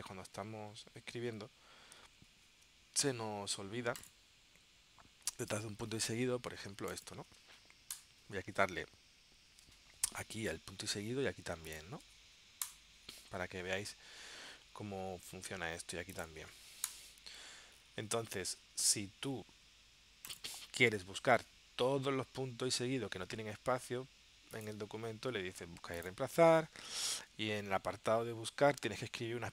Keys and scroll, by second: 0.6 super+Tab, 2.1 super+Tab.